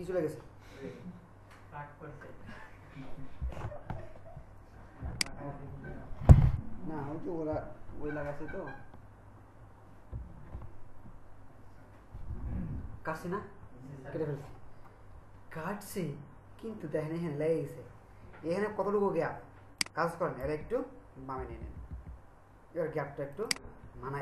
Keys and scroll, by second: 21.7 Left.